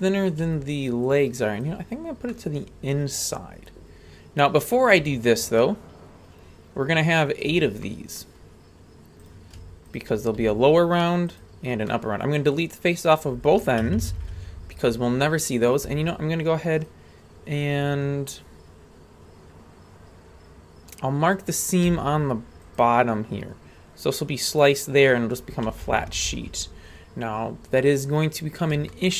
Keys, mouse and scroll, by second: 1.1 ctrl+click, 2.3-4.7 middle drag, 5.6-7.5 ctrl+drag, 7.8 middle click, 8.4-9.2 scroll up 1, 9.2 right click, 9.2-9.6 scroll up 1, 9.9 shift+right click, 10.4 x, 11.9 middle click, 13.1 right click, 13.8 ctrl+KP_Add, 14.0 ctrl+KP_Add, 14.1 ctrl+KP_Add, 14.2 ctrl+KP_Add, 15.6 click, 16.8-19.0 right drag, 21.9 w, 23.9-24.3 scroll down 1, 25.8 ctrl+KP_Add, 26.0 ctrl+KP_Add, 26.1 ctrl+KP_Add, 26.2 ctrl+KP_Add, 26.9-28.7 scroll down 5, 28.7 scroll down 1, 28.9 shift+middle drag.